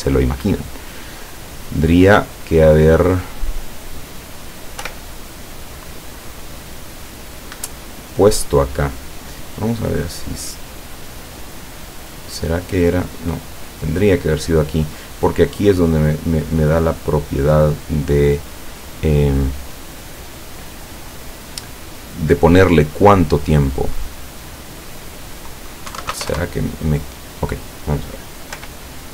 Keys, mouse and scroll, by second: 0.2 click, 2.2 click, 4.9 p, 7.6 Escape, 9.8 click, 10.9 click, 12.1 click, 24.4 click, 25.9 KP_1, 26.0 KP_2, 26.1 KP_0, 26.3 KP_Enter, 28.6 p.